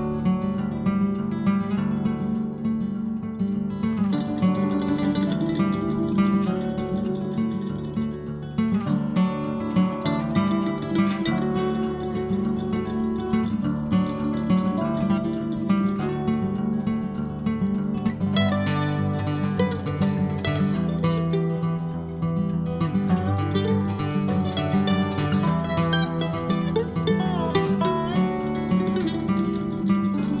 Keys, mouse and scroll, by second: 0.2 click, 0.7-2.2 middle drag, 4.3 click, 5.2 click, 5.9 click, 7.1-8.7 drag, 9.8 scroll down 2, 10.0-11.5 middle drag, 11.6 click, 12.5 middle click, 13.3-13.9 scroll down 7, 13.9-15.0 scroll up 1, 15.8-16.1 scroll down 2, 16.1-17.7 scroll up 2, 18.0 click, 18.4-19.3 scroll up 9, 19.3-20.3 drag, 20.7 click, 21.2-22.4 drag, 22.4 p, 23.9 l, 29.3 click, 29.8 click.